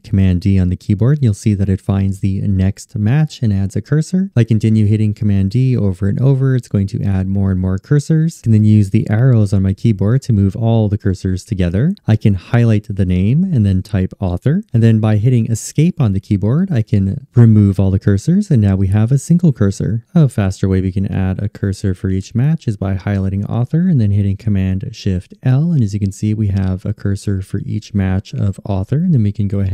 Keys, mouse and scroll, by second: 15.3 Escape, 22.9 shift+super+l.